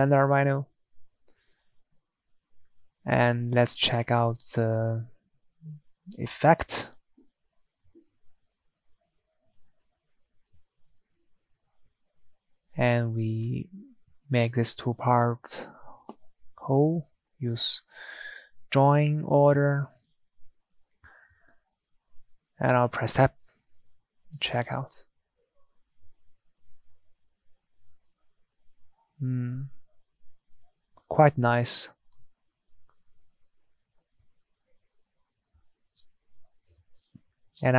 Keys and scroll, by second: 22.9 Tab, 26.6 Tab, 30.4 Tab.